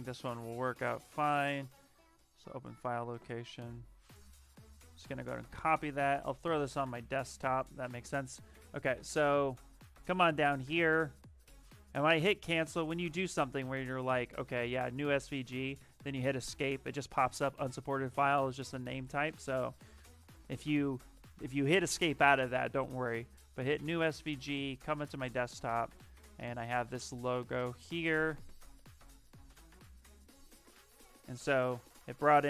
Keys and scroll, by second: 4.9 ctrl+c, 5.1 ctrl+c, 7.3 ctrl+v, 15.7 Escape.